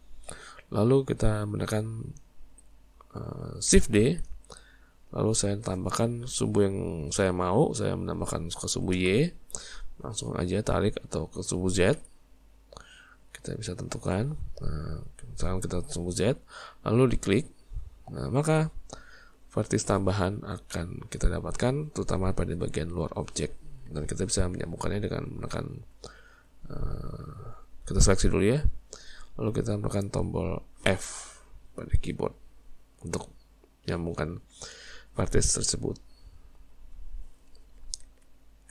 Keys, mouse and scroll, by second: 0.1-4.0 shift+middle drag, 4.0 shift+d, 18.6-21.7 middle drag, 26.0 click, 27.2 shift+click, 28.7 shift+click, 29.7 shift+click, 30.9 f, 33.0 Tab, 33.9 Tab, 35.4 Tab, 37.0-38.7 middle drag.